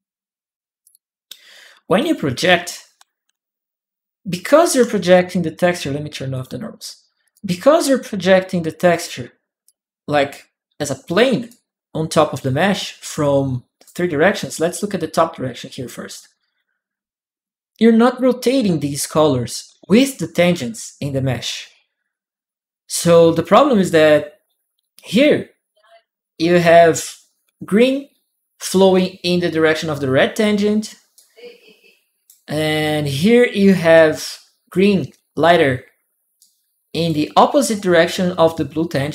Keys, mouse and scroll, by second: 0.6 click, 1.8-5.2 right drag, 3.0-5.4 typing, 4.3 click, 6.1 click, 7.0-8.7 drag, 7.1-10.1 right drag, 9.4-10.8 drag, 11.2-13.4 drag, 13.6 click, 13.6 right click, 14.8-16.4 drag, 14.8 right click, 16.8 click, 24.9-26.1 drag, 24.9 right click, 25.7 right click, 30.9-32.0 drag, 30.9-32.6 right drag, 32.2 click, 33.0 click, 33.0 right click, 33.2 click, 33.2 right click, 33.3 click, 33.3-34.5 right drag, 36.2 click, 36.2 right click, 36.3 click, 37.5 click, 37.9 right click, 38.1-39.1 right drag, 38.2 click.